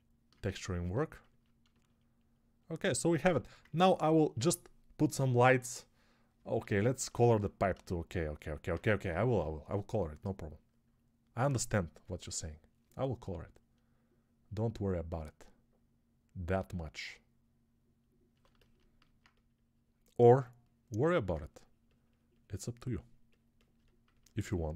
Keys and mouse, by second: 6.5 alt+q, 18.3-23.6 ctrl+alt+right drag, 20.8-23.6 alt+drag.